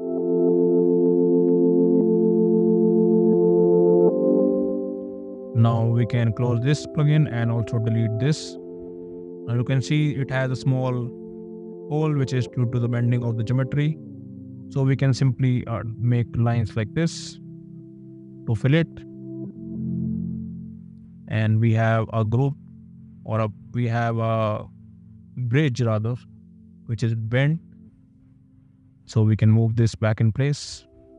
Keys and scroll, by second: 8.2 d, 15.0 l, 18.1 space, 25.9 d, 30.1 m.